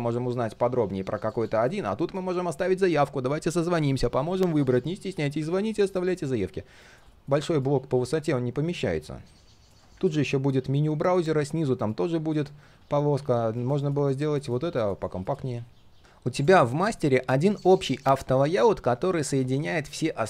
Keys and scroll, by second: 5.5 ctrl+z, 12.7 ctrl+z, 16.0 ctrl+z.